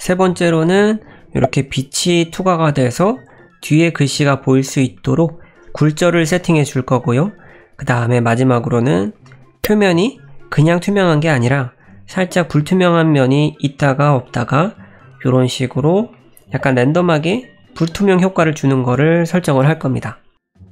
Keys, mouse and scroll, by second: 0.2 middle click, 3.2 middle click, 4.9 middle click, 7.2 middle click, 8.5 middle click, 9.2-9.5 scroll up 1, 9.5 scroll down 1, 9.6 middle click, 10.9 middle click, 16.1 middle click, 20.5-20.7 scroll down 6.